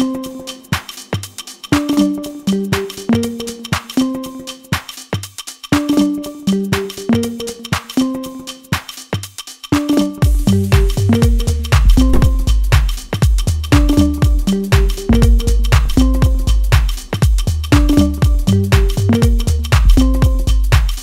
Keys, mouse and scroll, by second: 0.0 middle click, 14.5 middle click, 15.3 KP_7, 16.3 shift+d.